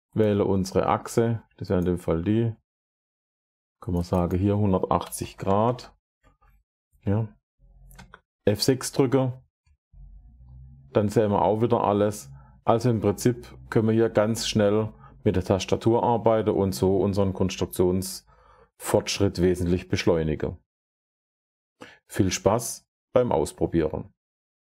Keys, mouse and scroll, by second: 0.1 click, 1.7 click, 3.8 click, 4.0 click, 4.7-5.7 typing, 7.8 F6, 8.2 typing, 14.8 middle click, 15.6-17.9 middle drag.